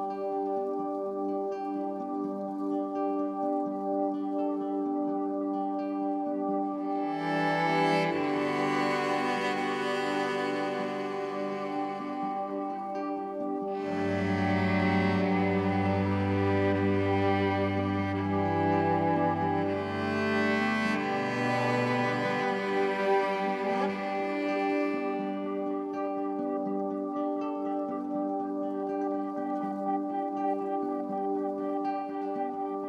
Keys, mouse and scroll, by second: 0.5-5.5 alt+shift+drag, 7.4 Tab, 11.7 Delete, 12.1 click, 13.9 e, 15.6 click, 16.3 Tab, 17.3-19.2 drag, 19.7 ctrl+alt+click, 20.3 alt+click, 21.0 click, 21.8 r, 22.1 y, 23.9-25.7 ctrl+alt+drag, 25.7 ctrl+s, 26.4-31.8 ctrl+alt+drag, 31.9 click.